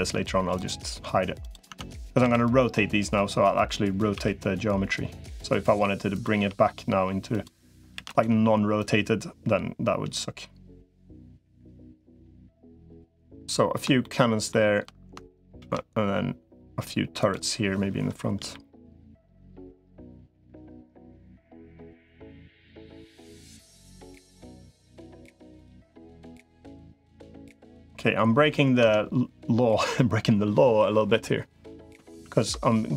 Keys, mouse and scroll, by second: 0.5 Tab, 1.5 Tab, 2.1 a, 3.9 r, 6.1 g, 7.7 shift+d, 8.7-11.5 drag, 13.8 shift+middle click, 15.5 shift+d, 18.3 KP_3, 19.9-22.5 drag, 22.8 middle click, 24.5-25.5 drag, 25.7 middle click, 28.7 Tab, 32.1 ctrl+z.